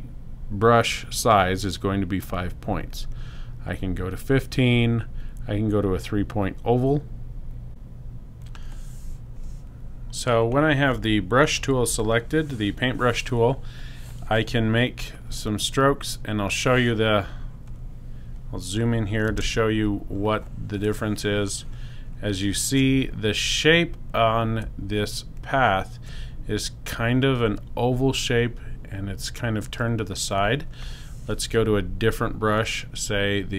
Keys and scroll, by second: 11.8 b, 19.3 super+space.